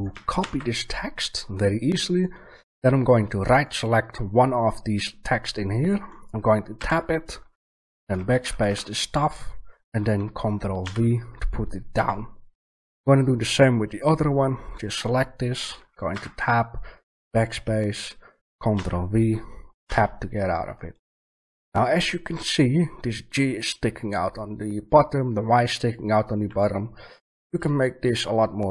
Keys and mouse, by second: 3.5-5.1 right drag, 6.7 Tab, 7.8-10.9 BackSpace, 10.8 ctrl+v, 11.9 Tab, 14.6 right click, 16.1 Tab, 16.3-19.7 BackSpace, 18.7 ctrl+v, 19.8 Tab.